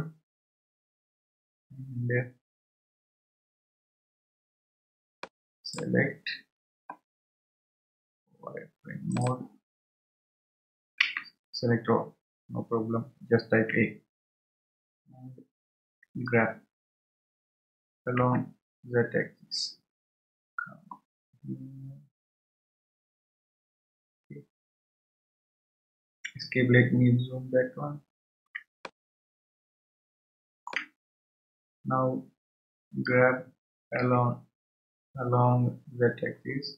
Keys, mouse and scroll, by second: 0.4 Tab, 5.2 click, 9.1 click, 12.0 a, 14.5 a, 17.0 g, 27.3-28.5 scroll up 3, 30.5 shift+middle click, 31.0 scroll up 1, 31.7 scroll up 1, 32.9 g.